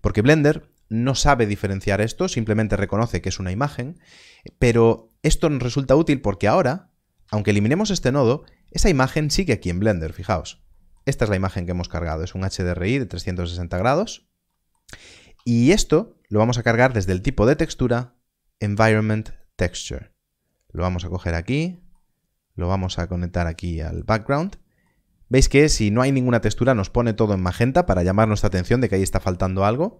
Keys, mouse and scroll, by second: 7.2 x, 9.4 click, 10.6 middle click, 11.0 scroll down 1, 12.4 middle click, 13.6 scroll up 1, 14.4 middle click, 15.3 shift+a, 19.2 click, 21.2 scroll up 1, 21.7 middle click, 22.6 click, 24.4 middle click.